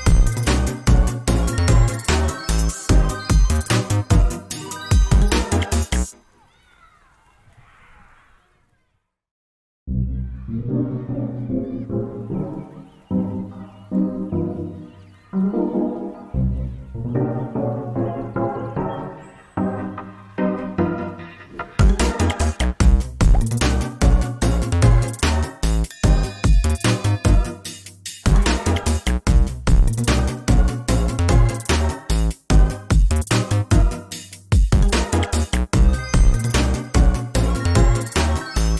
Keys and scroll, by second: 10.1 ctrl+shift+i, 11.0 ctrl+v, 16.9 ctrl+alt+z, 18.7 ctrl+space, 22.5 ctrl+c.